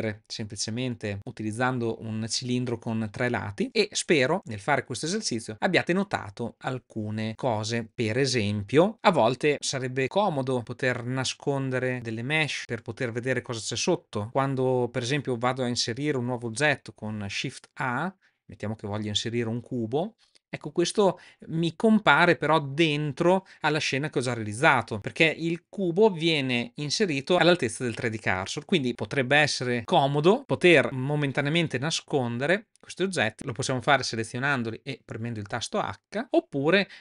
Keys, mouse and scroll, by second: 16.8 shift+a, 24.9-27.3 middle drag, 29.8 middle click, 35.4 h, 36.2 h.